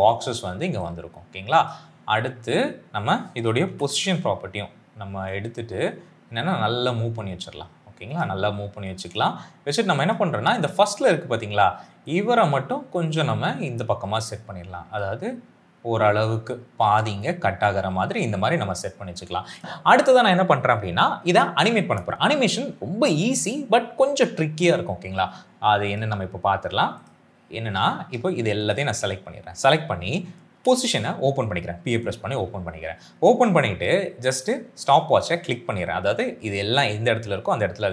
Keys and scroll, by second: 3.7 shift+p, 30.4 p.